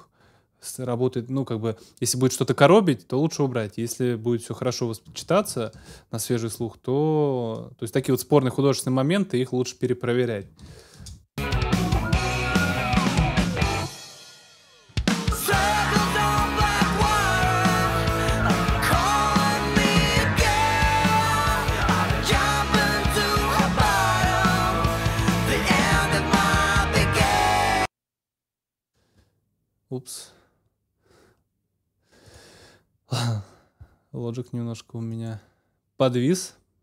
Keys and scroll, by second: 5.8 super+s, 10.6 super+s, 11.0 super+space.